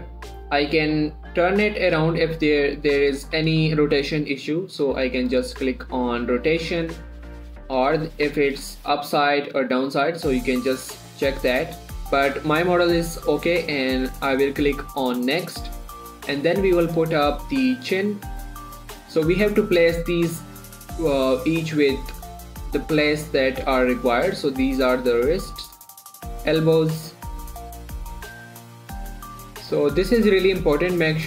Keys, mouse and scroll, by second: 5.8 click, 5.8 typing, 15.6-22.3 drag, 15.6 typing, 17.0-17.7 typing, 19.6 typing, 23.0-31.2 drag, 27.7 typing.